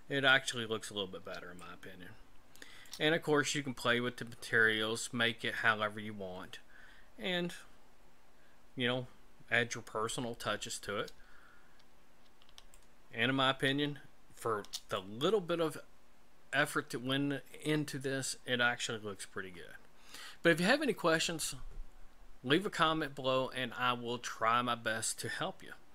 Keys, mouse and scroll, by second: 0.7-1.1 scroll up 4, 1.6 shift+middle click, 6.8-7.2 scroll down 2, 7.5 scroll down 2, 11.7 scroll down 2, 12.7 shift+middle click.